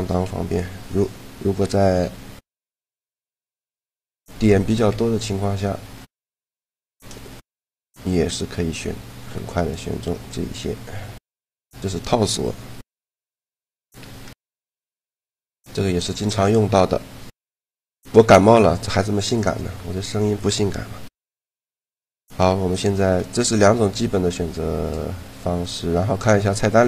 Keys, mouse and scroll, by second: 0.0 a, 0.3 middle click, 1.5 a, 1.8 w, 3.1 w, 4.0 a, 4.7 z, 7.7-9.6 drag, 10.0-11.1 middle drag, 16.8 Tab, 22.7 a, 26.6 click.